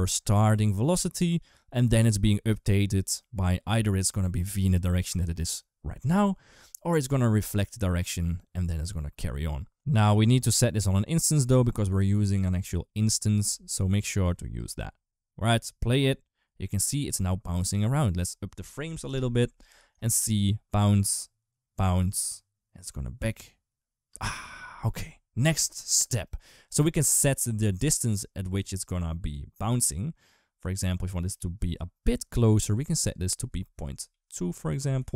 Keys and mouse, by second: 9.6 ctrl+z, 9.6 ctrl+s, 9.6 space, 10.3-11.4 drag, 13.3 ctrl+s, 14.1 click, 14.4 space, 18.0 click, 19.6 ctrl+s, 23.9 space, 27.1 click, 28.2-31.1 drag, 32.8-35.1 drag, 33.8 Down, 34.8 Left.